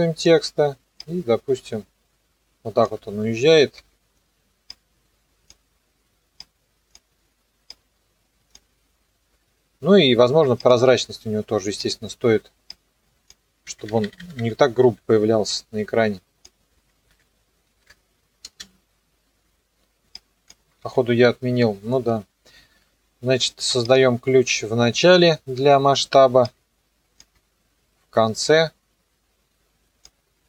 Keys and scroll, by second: 3.8 p, 10.7 t, 14.8 Page_Down, 17.0 KP_0, 18.4 space, 20.8 s, 25.2 u.